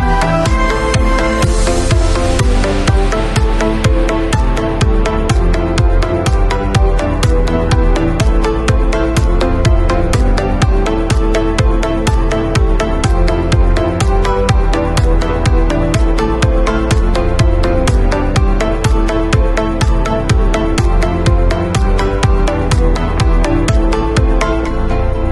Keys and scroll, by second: 11.5 v, 16.5 w, 17.1 shift+w, 20.8 alt+Delete, 21.8 alt+super+Delete, 22.1 alt+super+d, 22.3 super+v.